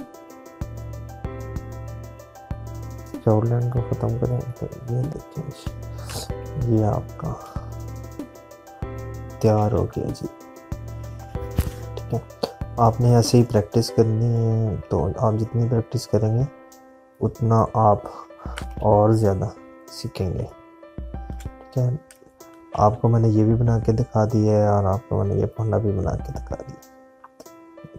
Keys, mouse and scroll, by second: 8.4 space, 8.6 click, 9.0 space, 9.1 space, 10.3-11.1 typing, 11.5 click, 21.1 space, 21.3 click, 22.0 space, 23.7 z, 24.1 click.